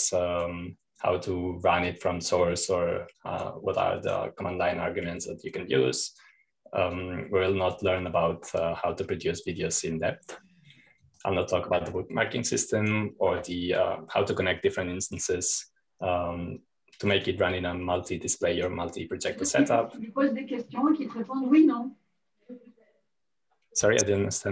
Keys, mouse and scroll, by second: 0.0 click, 1.6-2.7 drag, 4.6-9.9 drag, 12.5 click, 14.1-15.2 drag, 18.6 click, 19.5-20.7 drag, 21.4-22.1 scroll down 1, 22.3 click.